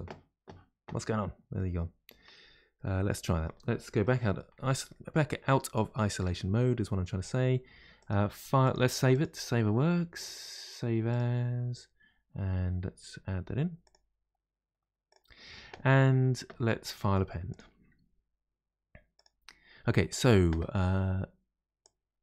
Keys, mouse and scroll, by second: 1.5-2.4 middle drag, 2.4-2.7 scroll down 2, 2.7-3.9 middle drag, 3.9 KP_Divide, 4.5-4.9 scroll down 2, 4.9-5.5 middle drag, 5.5-5.9 scroll down 1, 5.9-6.3 shift+middle drag, 6.3-8.0 scroll down 1, 8.0 click, 9.1-20.5 drag.